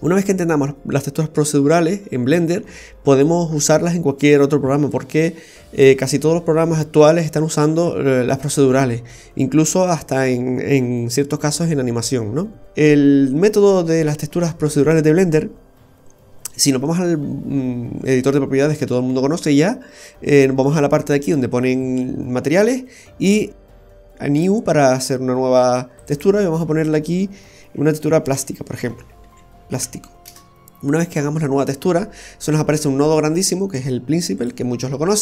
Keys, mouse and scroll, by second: 12.7 scroll up 2, 13.4 middle click, 13.4-13.9 scroll up 2, 21.2 click, 24.3 click, 26.0 click, 33.2 click, 33.2 typing, 34.4 click.